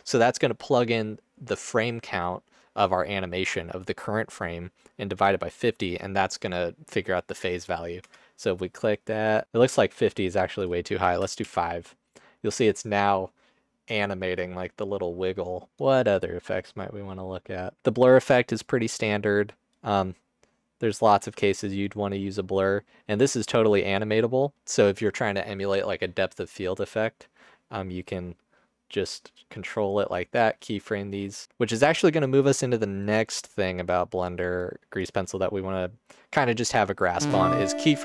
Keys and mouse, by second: 0.0 click, 1.5 click, 5.4-8.1 drag, 10.0-11.5 drag, 15.6-17.8 drag, 15.6 space, 19.8-21.0 drag, 21.2 ctrl+z, 29.9-31.8 drag, 34.7 click.